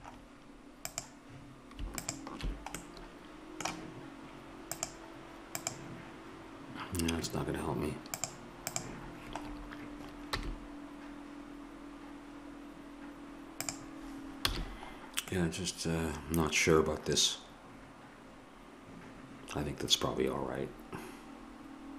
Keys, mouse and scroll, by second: 1.0-2.8 drag, 2.8-4.7 middle drag, 4.7-6.5 drag, 8.1-9.6 drag, 9.6 middle click, 10.4 g, 14.5 a, 15.3-17.2 middle drag.